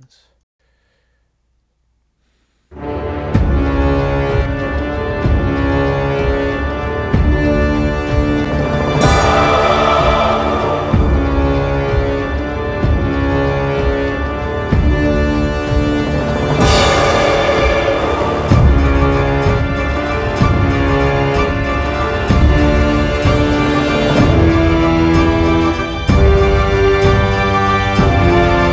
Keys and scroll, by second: 0.5 space.